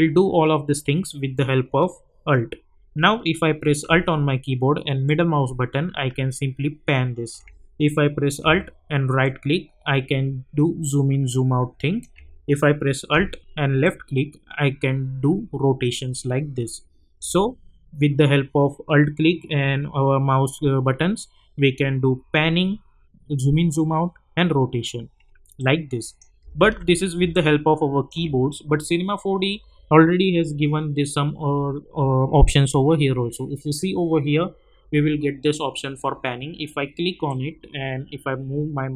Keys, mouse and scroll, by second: 0.2 scroll up 1, 5.0-7.5 alt+middle drag, 9.2-12.0 alt+right drag, 13.9-17.3 alt+drag, 25.6-26.2 click, 26.6 ctrl+z, 27.3-28.2 alt+drag, 37.2-38.9 drag.